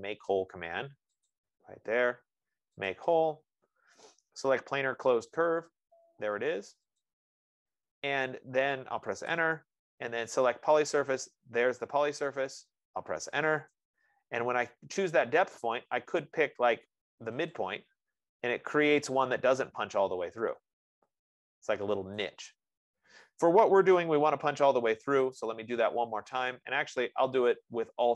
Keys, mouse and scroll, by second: 1.7 click, 3.2 click, 7.4 click, 9.5 Return, 11.9 click, 13.9 Return, 16.2 F15, 18.0 click, 22.6 right click, 24.4 ctrl+z, 26.8 click.